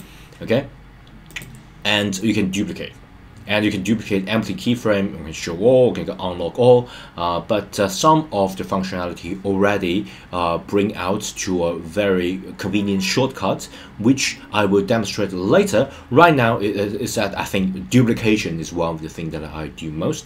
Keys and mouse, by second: 1.2-20.2 drag.